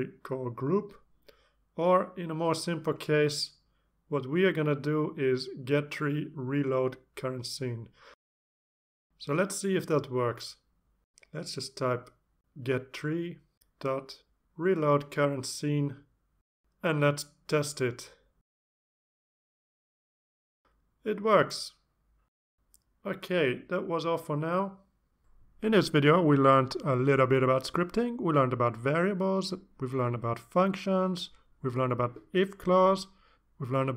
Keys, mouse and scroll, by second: 0.3 click, 1.2 click, 3.3-4.9 drag, 5.5 click, 6.4 click, 8.7 alt+Tab, 9.3 alt+Tab, 10.5 click, 11.2 Return, 11.4-14.9 typing, 15.0 Down, 15.2 Return, 16.8 click, 24.3 click, 31.6 click.